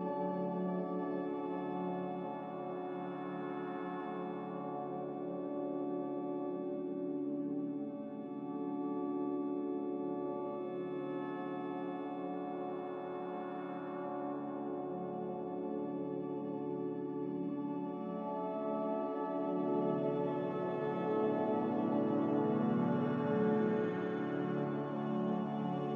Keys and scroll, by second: 2.0-3.5 typing, 4.7 typing, 10.3 a, 12.7 z, 15.4-16.2 typing, 20.8 2, 21.1 Return, 21.1 0, 24.4 n.